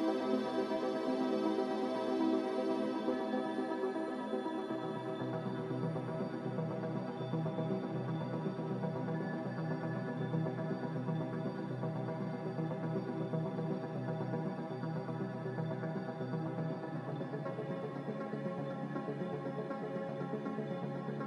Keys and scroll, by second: 4.8 Escape, 4.9 Escape, 5.0 Escape, 5.4 z, 9.6 z, 12.6 Escape, 12.7 Escape, 13.1 a, 16.4 Delete, 16.7-20.1 typing.